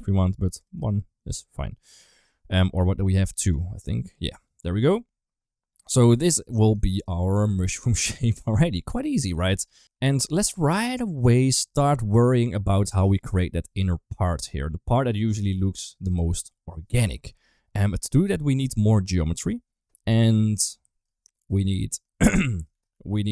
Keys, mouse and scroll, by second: 0.4 click, 0.6 click, 4.1 middle click, 4.5 Tab, 4.8-6.4 middle drag, 6.6 shift+middle drag, 7.0-8.8 middle drag, 9.0 Tab, 9.6 Tab, 10.0 right click, 10.4 middle click, 11.0 click, 12.1 shift+middle drag, 12.4 middle click, 17.8 middle click, 18.5 middle click, 20.7 middle drag, 21.9 shift+middle drag, 22.6 shift+d.